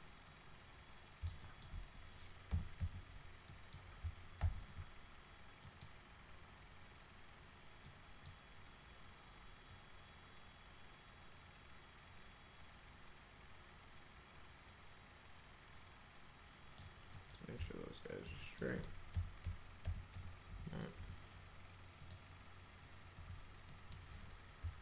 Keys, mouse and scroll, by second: 1.4 alt+middle click, 2.5 l, 2.8 z, 3.5 middle click, 4.4 alt+q, 5.6 middle click, 7.8 middle click, 9.7-16.8 drag, 17.1 middle click, 17.7 alt+middle click, 18.4 middle click, 18.7 middle click, 19.1 F3, 19.8 F3, 20.1 F4, 20.5 F4, 20.7 click, 21.0 F4, 22.0 click, 23.2 F4, 23.7 middle click.